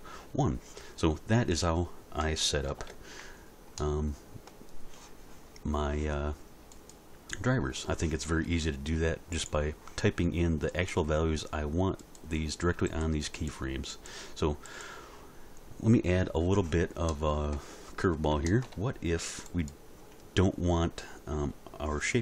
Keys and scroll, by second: 2.7 alt+r.